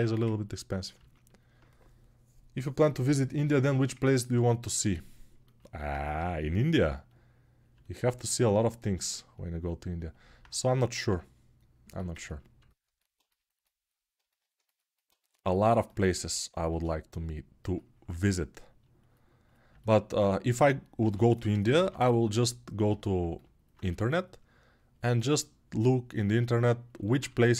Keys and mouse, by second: 5.9 g, 17.6-27.5 ctrl+drag, 18.3 ctrl+r, 20.8 g, 22.7 ], 23.6 2, 27.3 ctrl+1.